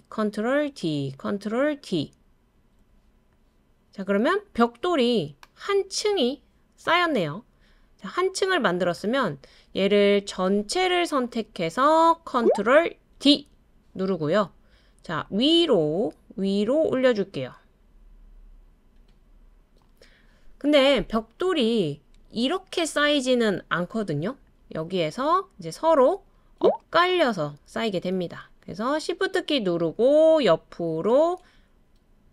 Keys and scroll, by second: 0.6 super+d, 1.5 super+d, 2.5 super+d, 13.2 super+d.